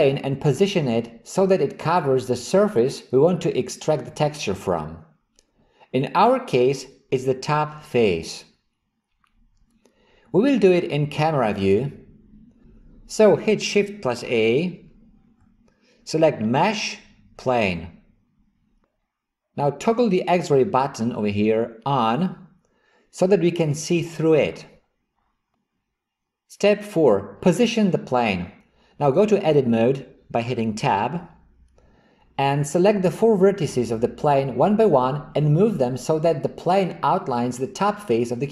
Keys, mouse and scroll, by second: 15.3 shift+a, 22.0 click, 31.2 Tab.